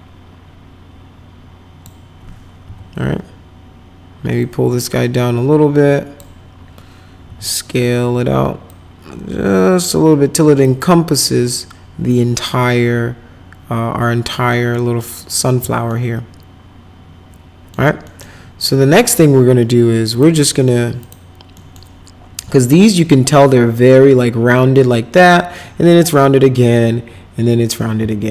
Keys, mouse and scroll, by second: 2.6 w, 4.4-6.1 drag, 7.2 r, 8.6-10.6 drag, 12.1-14.3 drag, 14.7 right click, 15.8-17.7 alt+right drag, 18.1 right click, 18.2 middle click, 20.1 click, 21.0 click, 21.5 middle click.